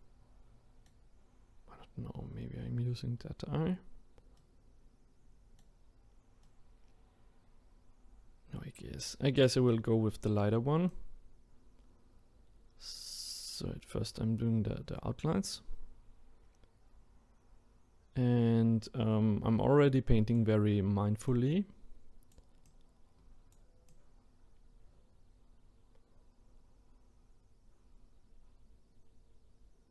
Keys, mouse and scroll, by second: 10.9-29.9 drag.